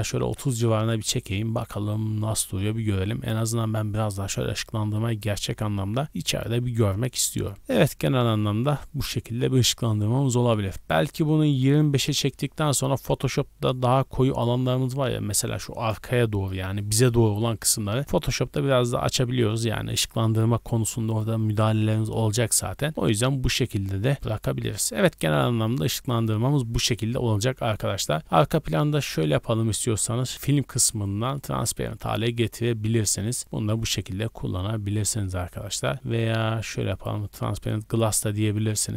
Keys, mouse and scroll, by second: 10.7-12.0 drag, 28.4 click, 28.9-29.6 scroll down 2, 30.3 click, 30.3-31.3 scroll down 6, 31.3 click, 34.3 scroll down 2, 35.1 scroll down 1, 35.7 scroll down 1, 35.8 scroll down 1, 36.9 click.